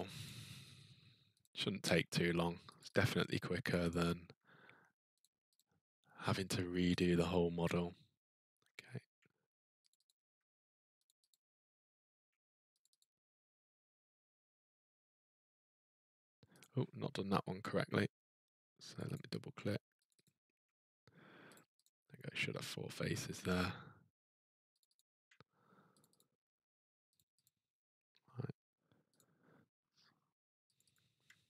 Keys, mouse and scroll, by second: 0.2 click, 1.4 click, 2.8 ctrl+click, 2.9 ctrl+click, 3.9 ctrl+click, 4.0 ctrl+click, 5.2 click, 5.5 click, 6.9 click, 8.5-9.3 ctrl+scroll, 9.9 click, 10.1 ctrl+click, 10.1-10.6 ctrl+scroll, 10.6 ctrl+scroll, 11.0 click, 11.3 click, 12.8 ctrl+click, 12.8 ctrl+scroll, 13.0 ctrl+click, 16.6 click, 18.9 click, 19.1 click, 20.1 ctrl+click, 20.2 ctrl+click, 21.5 click, 21.8 click, 23.5 click, 24.8 click, 24.9 click, 26.0 click, 26.1 ctrl+click, 27.1 click, 27.4 click, 29.1 click, 30.8 click, 30.9 click.